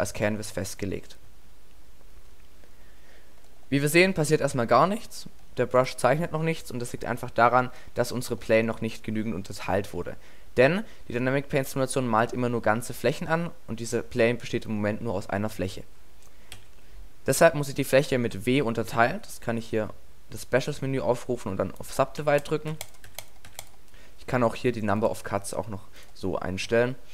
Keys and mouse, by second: 6.8-7.9 middle drag, 8.4 middle click, 9.7 middle click, 10.7 Tab, 16.6 w, 22.2 w, 22.7 w, 23.1 w, 23.5 w, 25.0 click.